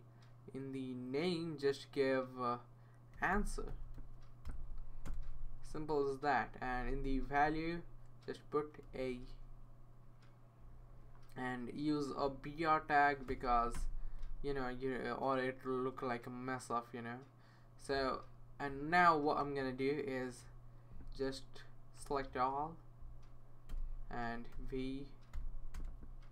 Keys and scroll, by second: 2.9-4.5 typing, 5.1 Return, 5.6 Tab, 6.1 Tab, 6.2 Right, 8.9 a, 10.6 Right, 13.0-13.9 typing, 15.2 typing, 22.0 super+c, 23.7 Return, 24.5 super+v, 25.7 Return.